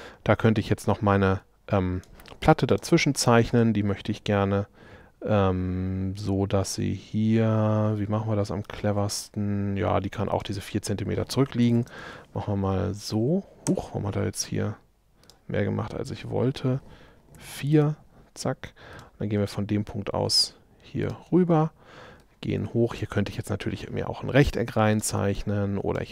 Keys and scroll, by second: 11.7 4, 13.7 Escape, 17.4 4, 17.8 Return.